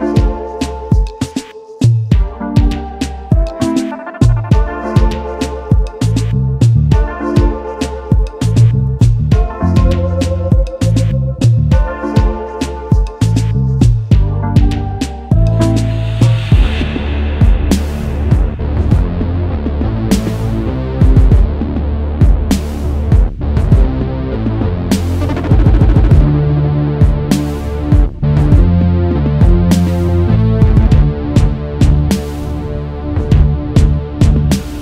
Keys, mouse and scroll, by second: 1.5 shift+click, 2.3 double click, 2.7 alt+scroll down 1, 5.1 space, 7.3 alt+shift+click, 8.5 alt+scroll up 1, 11.6-12.1 alt+scroll down 1, 14.4 ctrl+c, 14.7 ctrl+f, 16.2 right click, 19.2 shift+click, 19.6 right click, 21.4-21.8 alt+scroll down 1, 22.1 space, 22.1 double click, 22.6-23.2 alt+scroll down 1, 23.6-24.1 alt+scroll up 1, 24.1 space, 24.1 double click, 24.4 space, 28.6 double click.